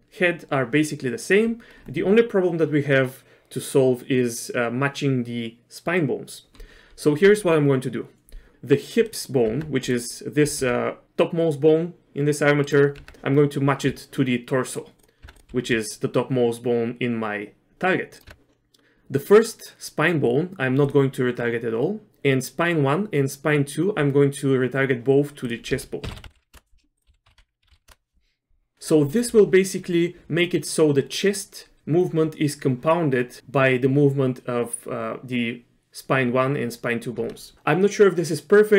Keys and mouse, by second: 9.1 click, 9.5 Tab, 10.5 r, 13.0 Tab, 14.7 click, 15.0 click, 15.2 Tab, 15.5 r, 18.3 Tab, 20.8 click, 25.5-26.8 drag, 27.0-29.5 drag.